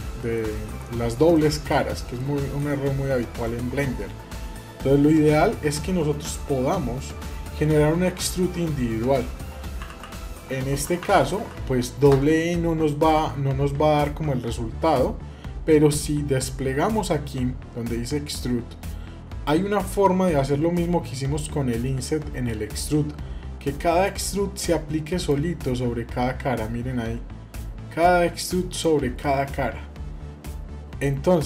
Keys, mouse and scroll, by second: 0.3 middle click, 0.7 scroll up 2, 1.1 middle click, 1.6 scroll down 1, 1.9 middle click, 22.8-23.8 drag, 25.0-28.6 drag, 29.0-30.9 middle drag.